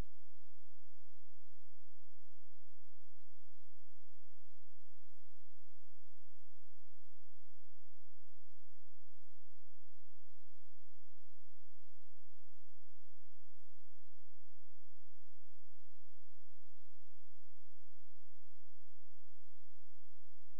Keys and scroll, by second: 1.7 space, 5.6 space.